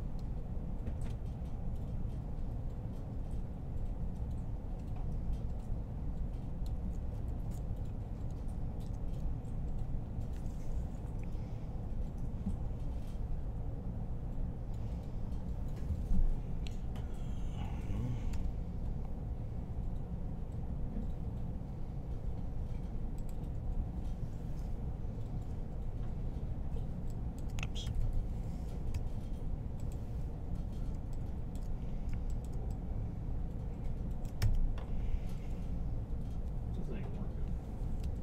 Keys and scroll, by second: 7.0 1, 18.1 i, 27.7-28.7 typing.